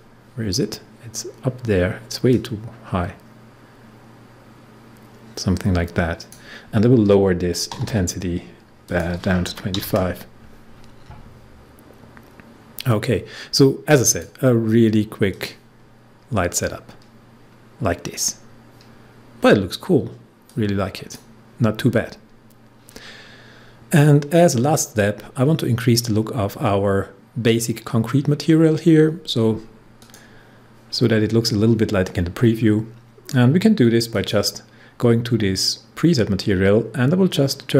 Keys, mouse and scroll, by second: 2.2-7.7 drag, 7.7 typing, 8.8 click, 9.4 typing, 14.0 click, 16.7-17.1 scroll up 1, 20.4-23.7 drag, 30.0 click, 31.0 scroll down 1, 34.1 click.